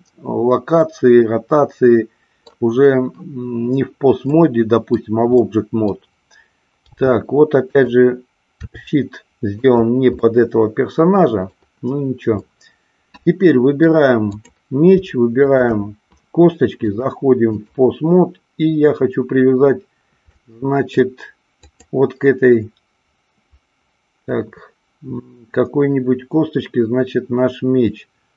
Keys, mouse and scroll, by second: 0.8 scroll up 2, 0.9-2.4 middle drag, 4.4-4.9 middle drag, 4.4 scroll up 1, 5.4-5.9 middle drag, 6.8 g, 8.7 r, 9.7 click, 10.2-11.5 middle drag, 12.4-13.8 middle drag, 15.4 shift+click, 16.8-17.7 drag, 20.3-20.9 middle drag, 21.7 click.